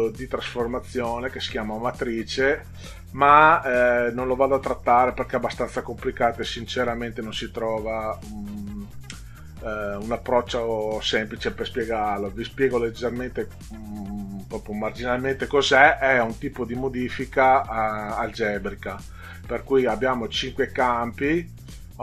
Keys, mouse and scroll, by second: 4.1-5.1 middle drag, 6.1 click, 7.2 click.